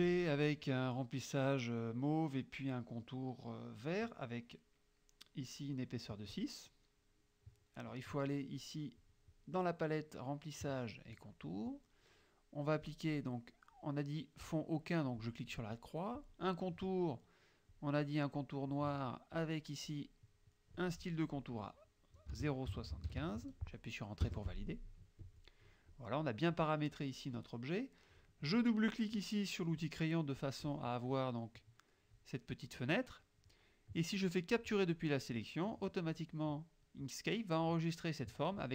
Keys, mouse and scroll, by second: 9.1 click, 12.9 click, 15.3 click, 16.3 click, 17.8-19.0 drag, 19.4 click, 22.4 KP_0, 22.8 KP_Decimal, 23.0 KP_7, 23.1 KP_5, 24.3 KP_Enter, 25.3 click, 26.0 click, 28.7 click, 30.5 click, 34.6 click.